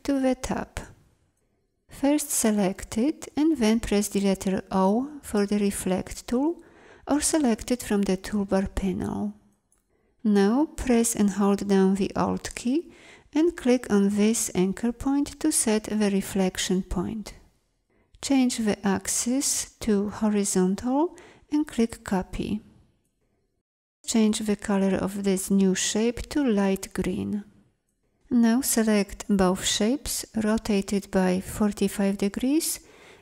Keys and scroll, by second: 2.1 v, 4.6 o.